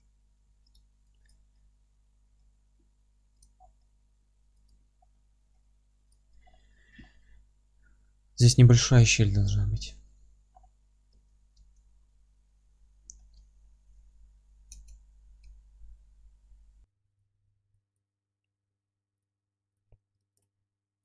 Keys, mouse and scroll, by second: 1.5-3.4 middle drag, 2.3 g, 3.4 click, 3.6 scroll down 1, 3.8 middle click, 4.7 click, 4.9 scroll up 1, 5.1 middle click, 5.5 g, 6.1 click, 6.4 scroll down 1, 7.6-17.2 middle drag, 7.9-9.1 scroll up 1, 9.7 scroll up 1, 10.2 scroll up 1, 10.5-11.1 scroll down 1, 11.1 Tab, 12.1 F3, 12.8-13.2 scroll up 1, 13.6-14.4 scroll down 1, 14.7 Tab, 15.4 a, 16.9 3, 17.2 click, 18.2-21.0 middle drag.